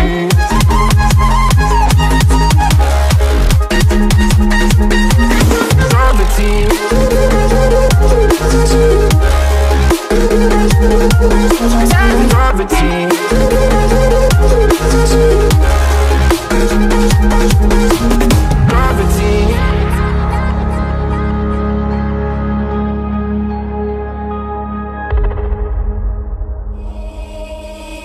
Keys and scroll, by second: 3.3 Left, 13.1 Right, 16.5 Left, 18.9 Right, 22.1 Left, 24.6 Left, 25.7 Right, 26.7 Left.